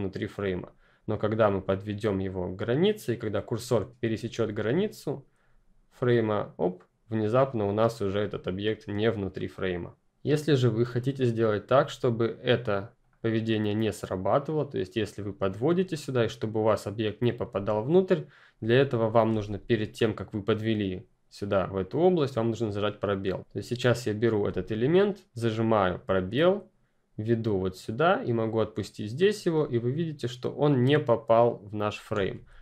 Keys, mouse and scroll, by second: 11.8 click, 17.5 space, 19.3 ctrl+z, 22.2 click, 24.4 space, 32.3 ctrl+space, 32.4 ctrl+z.